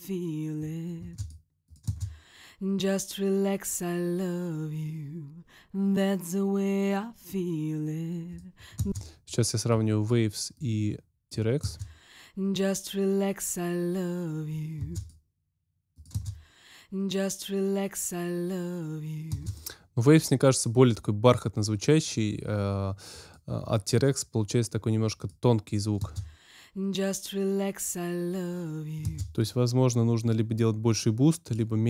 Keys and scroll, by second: 0.9 space, 8.7 space, 11.5 space, 14.7 space, 16.1 space, 19.3 space, 25.9 space, 29.0 space.